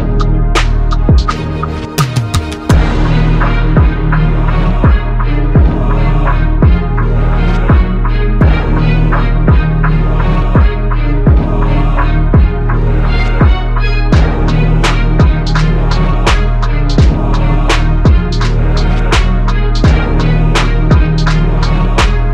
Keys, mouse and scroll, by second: 0.1 ctrl+r, 5.4 ctrl+r, 7.6 ctrl+r, 20.1 shift+right click.